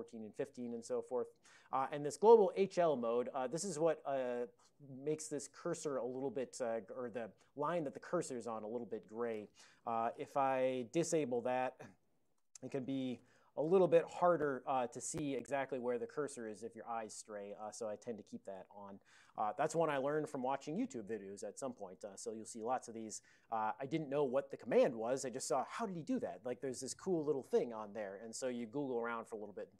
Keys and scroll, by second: 9.9 alt+x, 10.3-13.5 typing, 13.7 Return, 14.3 ctrl+n, 14.7 ctrl+p, 17.5 alt+x, 18.0 alt+p, 18.6 Return.